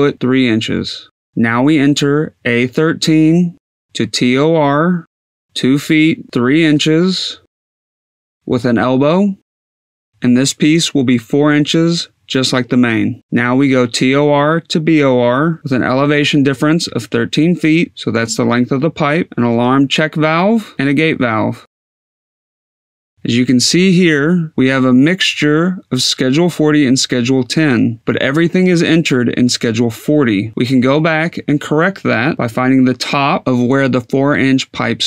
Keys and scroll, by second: 3.1-5.8 typing, 4.6 Tab, 6.0 Tab, 7.5-8.9 typing, 9.3 Tab, 9.9 e, 10.8 Tab, 11.7 4, 13.0 Tab, 14.0-17.2 typing, 15.5 Tab, 18.0 Tab, 20.3 g, 20.7 a, 21.7 Tab, 22.4 4.